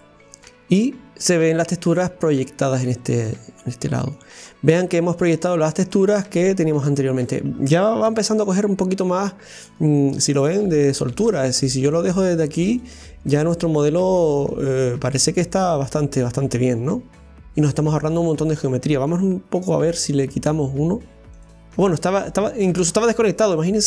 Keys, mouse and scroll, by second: 0.1 click, 1.3-1.8 scroll up 2, 1.8-4.5 middle drag, 4.5-5.0 scroll up 2, 5.4 scroll down 1, 5.9-7.4 middle drag, 7.4 scroll down 1, 8.1 Tab, 8.8 middle click, 9.2 Tab, 9.7 right click, 10.1-11.4 middle drag, 11.4 scroll down 1, 11.9-15.0 middle drag, 15.0-15.5 scroll down 1, 15.5-18.3 middle drag, 18.3 right click, 21.4 click, 22.7-23.1 scroll up 2.